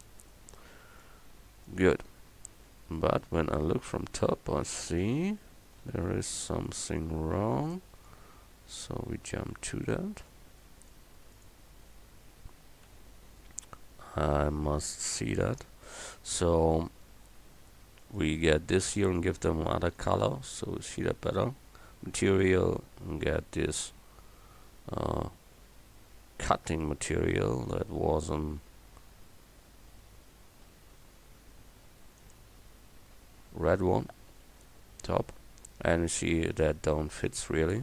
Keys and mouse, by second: 0.6 a, 2.8 Page_Down, 3.9 KP_7, 8.8 right click, 9.4 KP_Decimal, 11.4-12.6 right drag, 12.7 click, 12.9 KP_Decimal, 14.9 KP_7, 34.8 KP_7, 37.2 Tab.